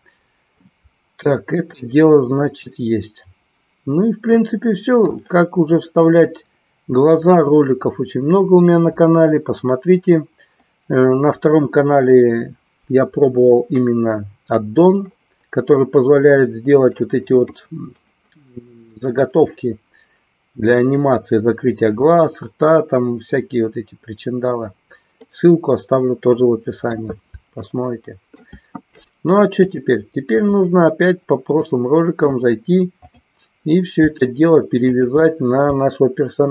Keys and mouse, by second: 4.4 middle click, 7.4-8.8 middle drag, 25.4-27.1 middle drag, 27.8 shift+middle click, 29.5-31.3 drag, 31.7 middle click, 33.1 click.